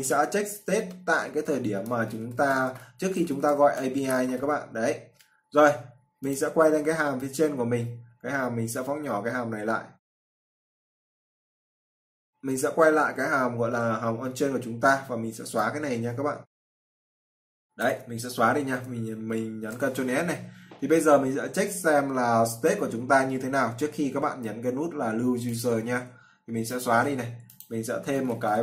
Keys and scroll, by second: 19.4 ctrl+s.